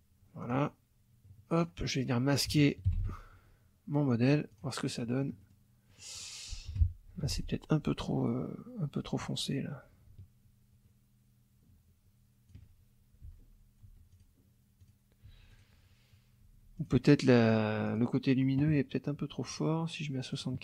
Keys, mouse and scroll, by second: 0.4 click, 1.6 click, 2.9 ctrl+shift+l, 4.2 click, 4.9 click, 5.9 click, 6.7 F2, 7.3 click, 8.9-12.7 drag, 13.2 F1, 13.8 F2, 14.1 click, 14.8 click, 15.3 F1, 15.5 click, 16.4 F2, 16.8 click, 17.9 click, 19.5 right click, 20.3 click.